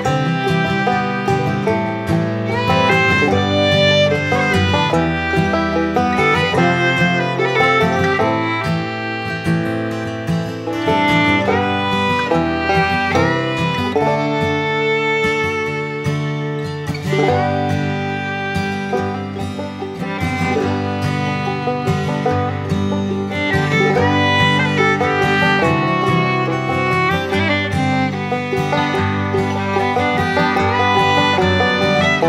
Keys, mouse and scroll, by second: 0.4-1.6 middle drag, 2.0 shift+middle click, 2.4 middle click, 3.4 middle click, 4.8 middle click, 7.1 click, 8.2 middle click, 9.2-12.2 drag, 12.5 middle click, 13.1 shift+middle click, 13.6 middle click, 14.1 shift+middle click, 15.1 middle click, 20.5 middle click, 21.3 middle click, 21.9 shift+middle click, 22.4 middle click, 25.8 click, 28.0-31.0 drag, 31.9 middle click.